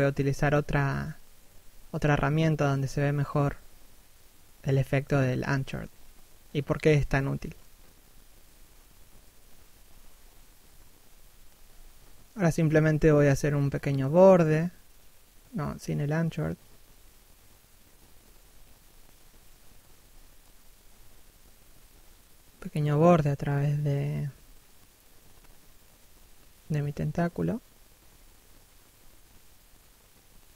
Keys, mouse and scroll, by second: 1.6 scroll down 1, 1.7 middle click, 6.5 middle click, 10.3 right click, 10.6 f, 11.6 click, 12.2 shift+click, 15.8 shift+click, 17.5 middle click, 18.4 shift+click, 20.0 middle click, 24.0 middle click, 24.6-25.4 scroll up 1, 25.6 middle click, 26.1-26.5 scroll down 1, 26.9 f, 27.2 click, 27.5 shift+click, 30.1 shift+middle click.